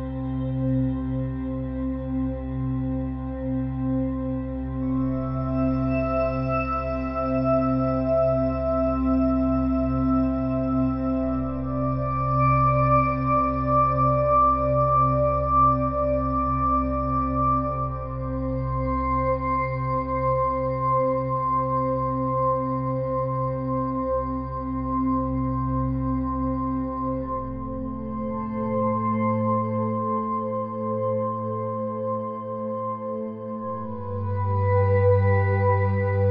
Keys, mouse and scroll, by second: 1.4 middle click, 1.6 click, 2.1-3.3 middle drag, 3.6-5.5 drag, 4.5 x, 5.8-7.6 middle drag, 10.5-13.3 drag, 12.5 f, 16.5 ctrl+z, 17.6 e, 21.1 s, 23.5-25.3 middle drag, 26.2-30.9 middle drag, 30.9-32.7 drag, 31.9 e, 36.1-36.3 middle drag.